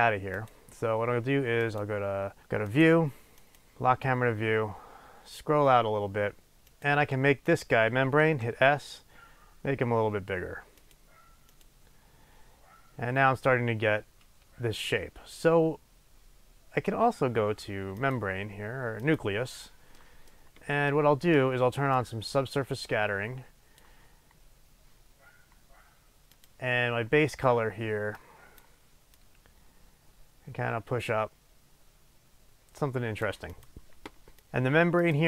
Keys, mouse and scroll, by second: 0.4 click, 1.6 click, 2.7 click, 3.4 click, 4.2-6.5 scroll down 1, 6.7 click, 7.4 click, 8.2 s, 10.9 click, 18.0 click, 19.0 click, 20.0 middle click, 22.0-26.4 drag, 33.5 click, 35.1 click.